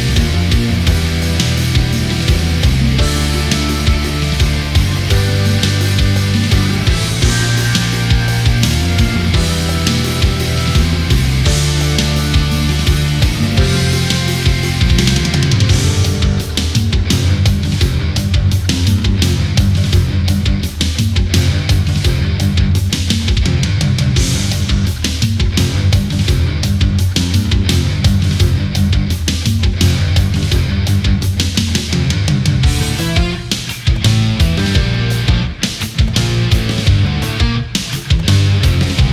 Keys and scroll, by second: 5.4 space, 15.4 ctrl+z, 21.5 ctrl+z, 23.1 ctrl+z, 38.4 ctrl+z.